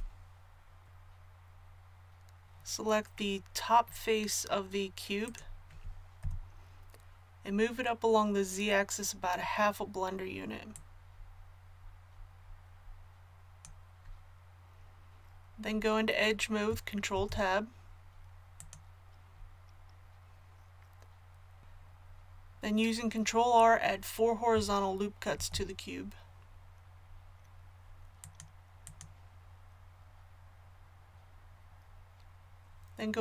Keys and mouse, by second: 6.2-9.4 drag, 6.2 KP_1, 9.4 KP_1, 10.7-17.1 drag, 17.1 ctrl+Tab, 21.6 ctrl+z, 25.3 ctrl+r, 29.0-33.2 drag.